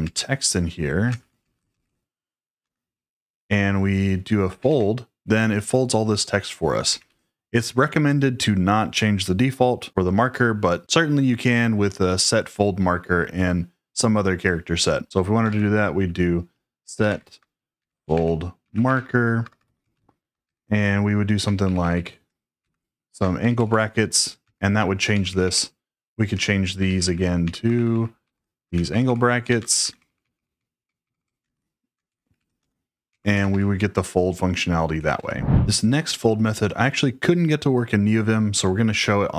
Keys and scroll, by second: 0.0-2.1 typing, 2.5 Escape, 4.2-5.1 typing, 6.8 typing, 15.4 shift+;, 16.7-20.4 typing, 21.5-23.8 typing, 24.4 Return, 25.0-35.4 typing, 28.6 Escape.